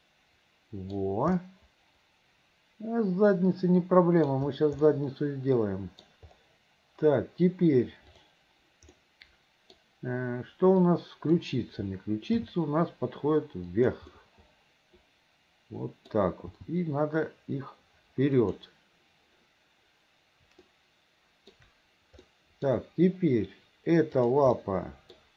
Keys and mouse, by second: 1.5-4.4 middle drag, 5.0-6.2 middle drag, 8.2 click, 9.0 middle click, 11.0 click, 12.5 g, 14.4-16.3 drag, 16.7 g, 20.8 shift+click, 22.5 middle click, 24.7 middle click.